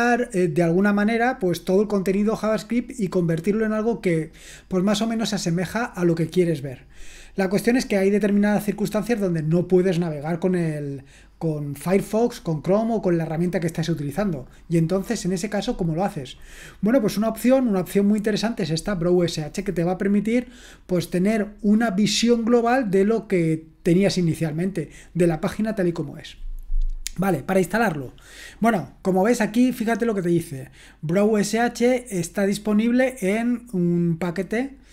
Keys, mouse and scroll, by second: 28.9-31.8 scroll down 1, 31.8-34.9 scroll down 1.